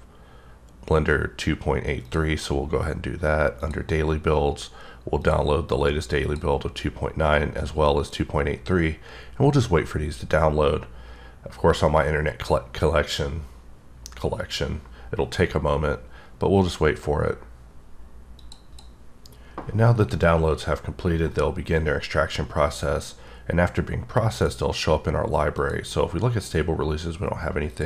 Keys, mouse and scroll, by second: 2.0 click, 3.6 click, 5.2 click, 6.2 click, 25.7 click.